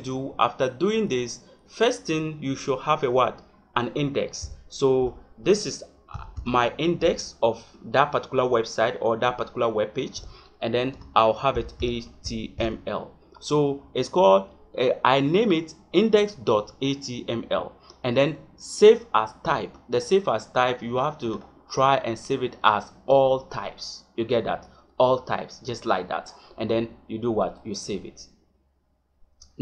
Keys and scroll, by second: 10.9 Caps_Lock, 11.5 h.